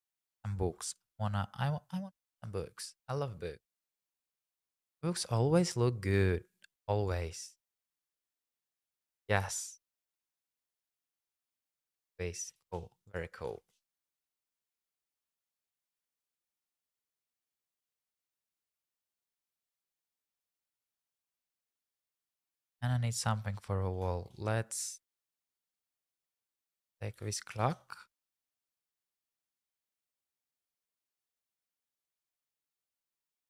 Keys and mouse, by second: 8.5 r, 8.6 z, 9.1 click, 9.3 g, 9.5 shift+z, 9.9 click, 10.3 click, 10.9 g, 11.2 shift+z, 11.6 click, 12.4 g, 12.7 shift+z, 13.1 click, 21.6 click, 25.0 click, 27.1 r, 27.2 z, 27.5 KP_9, 27.6 KP_0, 28.1 KP_Subtract, 28.4 KP_Enter, 29.5 g, 29.8 click, 29.8 z, 30.3 y, 30.9 x, 32.9 click, 33.0 g, 33.1 z, 33.3 click.